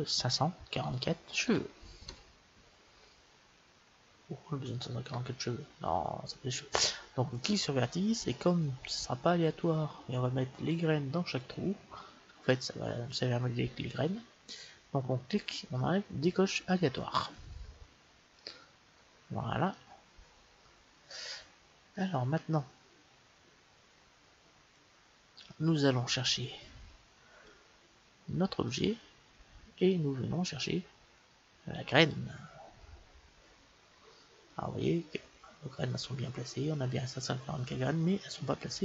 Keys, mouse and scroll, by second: 1.4 KP_4, 6.8-8.8 drag, 8.8-12.4 middle drag, 17.2-18.9 drag, 18.5-21.5 middle drag, 21.9-23.2 middle drag, 28.8-31.5 drag, 34.4-36.3 middle drag.